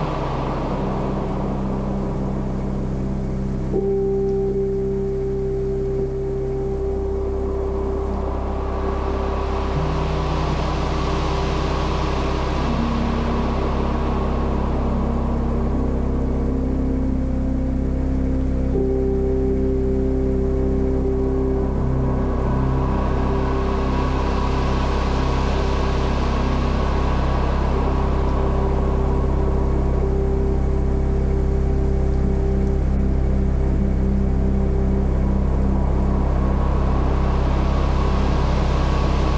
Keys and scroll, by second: 3.8 ctrl+l.